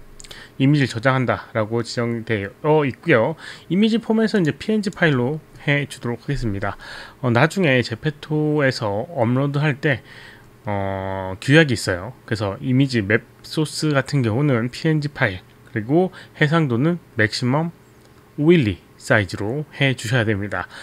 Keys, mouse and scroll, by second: 4.4 click, 4.8 click.